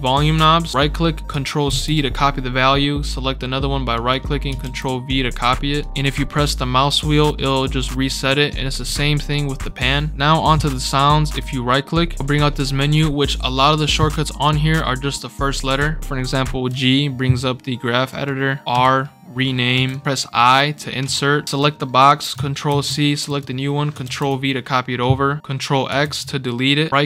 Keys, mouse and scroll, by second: 0.6 right click, 0.7 right click, 1.6 ctrl+c, 3.9 right click, 4.6 ctrl+v, 5.8 right click, 8.8 click, 11.4 right click, 16.4 g, 17.0 scroll up 2, 18.1 right click, 18.7 r, 19.7 Escape, 19.9 right click, 21.4 r, 21.6 click, 22.6 ctrl+c, 23.3 click, 24.0 ctrl+v, 25.1 scroll up 2, 26.0 ctrl+x.